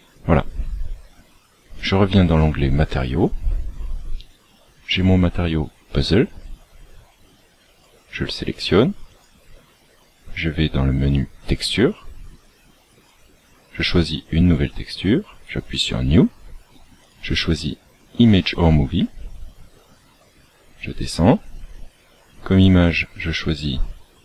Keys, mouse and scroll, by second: 0.2-0.5 scroll up 1, 1.7 click, 19.7-20.1 scroll down 2, 21.2-22.5 scroll down 6, 22.5 click.